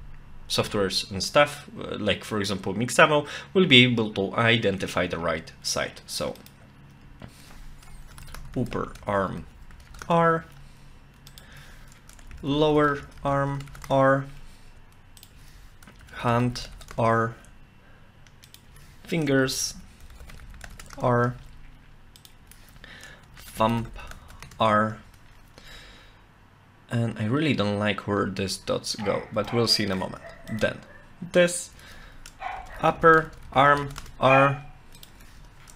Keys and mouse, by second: 6.4 click, 7.1 F2, 8.3 p, 11.3 click, 11.5 F2, 15.2 click, 15.9 shift+F2, 18.5 click, 18.7 F2, 19.7 i, 22.2 click, 22.4 F2, 29.5 shift+middle click, 30.5 click, 31.7 F2, 32.9 p, 33.1 r, 35.0 click, 35.2 F2.